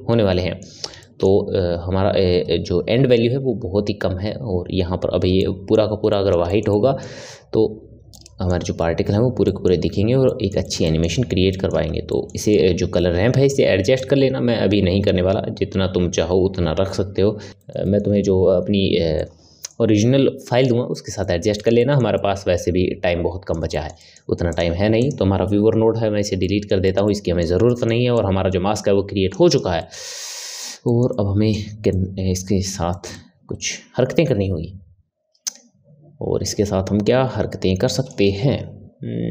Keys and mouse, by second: 5.4-14.0 middle drag, 14.0-17.5 drag, 17.5-24.5 ctrl+middle drag, 24.5 click, 25.0 click, 26.1 Delete, 26.4-28.1 middle drag, 28.1 click, 29.5 click, 29.8-36.2 middle drag.